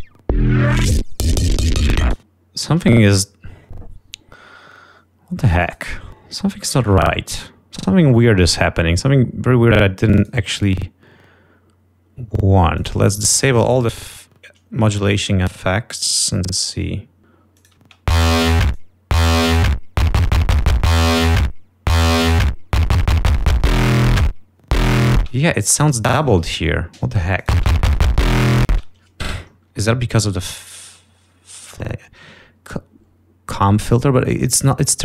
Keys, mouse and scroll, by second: 1.2 click, 2.2 space, 6.2 click, 10.5 click, 13.0 click, 13.9 click, 15.0 scroll down 2, 17.3 click, 18.1 click, 18.3 space, 19.2 click, 25.5 space, 25.9 scroll up 2, 26.4 click, 26.8 ctrl+scroll up 2, 27.7 click, 27.9 space, 29.0 space, 29.2 scroll down 2, 29.8-30.4 ctrl+scroll down 4, 34.8 click.